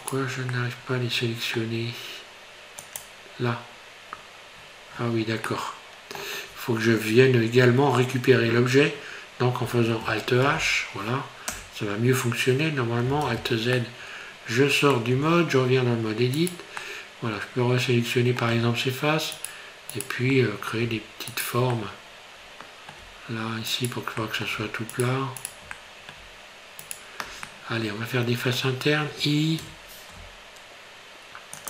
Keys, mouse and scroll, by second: 0.1 right click, 0.5 middle click, 3.0 click, 4.1-5.5 scroll down 13, 5.0-5.5 scroll up 2, 5.5 middle click, 6.5 scroll up 2, 6.7 scroll down 2, 10.5 alt+h, 11.6 Tab, 13.2 alt+z, 13.7 middle click, 15.1 Tab, 15.5 scroll up 3, 16.4 right click, 16.8 middle click, 19.4 shift+right click, 20.0 shift+right click, 20.4 middle click, 21.4 shift+right click, 21.7 middle click, 23.7 shift+right click, 24.2 middle click, 24.9 shift+right click, 25.4 shift+right click, 25.7 middle click, 26.8 shift+right click, 27.5 middle click, 29.7 i.